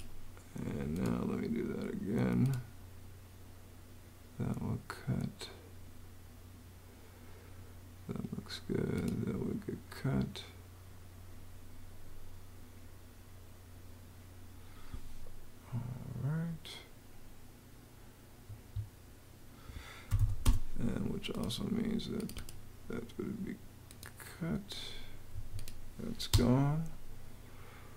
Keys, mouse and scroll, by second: 18.3 Escape, 19.6-20.5 typing, 25.1 Escape, 26.1 BackSpace.